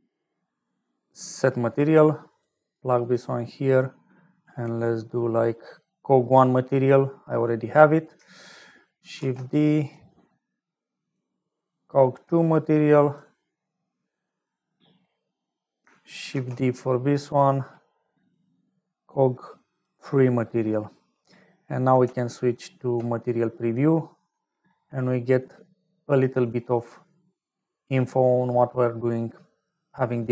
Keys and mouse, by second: 2.8 click, 4.3-6.8 drag, 7.5 click, 9.2 shift+d, 11.0-13.6 drag, 14.0 middle click, 16.4 shift+d, 18.2-20.2 drag, 22.0 z, 26.6 click, 29.8 click.